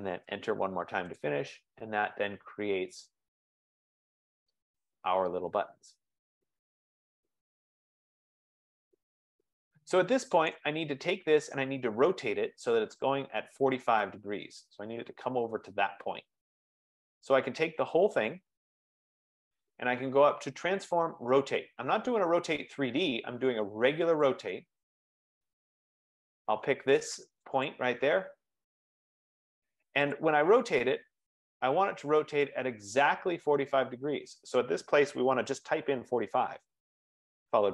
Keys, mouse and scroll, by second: 0.2 Return, 1.3 click, 1.7 scroll, 1.8 scroll up 4, 3.6 scroll, 10.7-14.7 right drag, 14.7-15.7 drag, 18.5 click, 20.9 click, 24.5 click, 25.5-25.9 scroll, 27.7 click, 30.2 click, 35.9-36.7 typing.